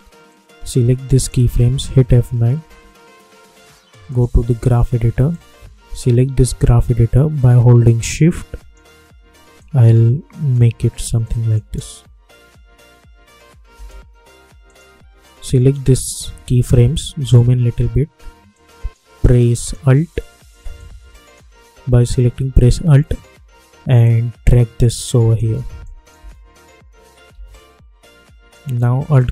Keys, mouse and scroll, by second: 1.8 F9, 4.0-7.8 drag, 7.8-9.7 shift+drag, 9.7-11.2 shift+drag, 11.6 space, 13.7 space, 14.6-17.1 drag, 17.1 =, 17.3 =, 18.5-24.0 drag, 24.0-25.8 alt+drag, 26.1 space, 28.4 click.